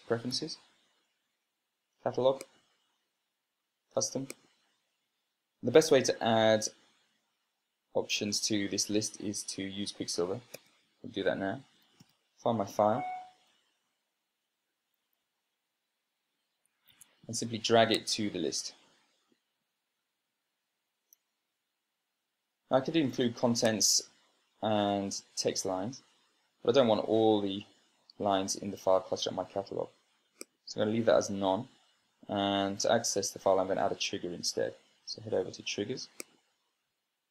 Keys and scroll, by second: 0.2 super+space, 11.2 super+space, 12.4-13.4 typing, 14.2 Right, 15.8 Down, 16.0 Down, 17.8 Escape, 21.8 super+space.